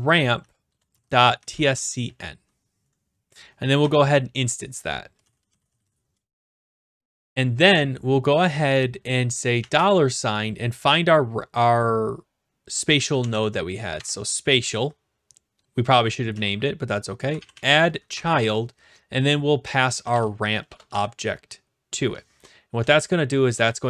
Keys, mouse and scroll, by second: 0.0-2.5 typing, 3.3 Right, 3.8 typing, 4.9-7.2 typing, 9.6 shift+4, 12.9-13.8 typing, 13.9 Tab, 16.3-18.0 typing, 18.1 Tab, 19.8-21.9 typing, 22.7 Right, 23.5 Return.